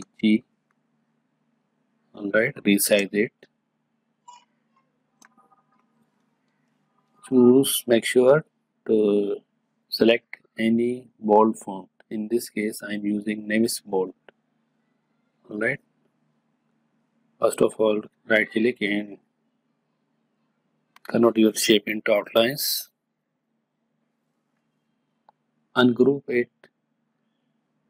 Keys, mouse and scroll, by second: 0.0-0.1 typing, 1.6 click, 3.1-8.5 alt+shift+drag, 18.2 right click, 23.7 click, 25.4 right click, 26.6 click.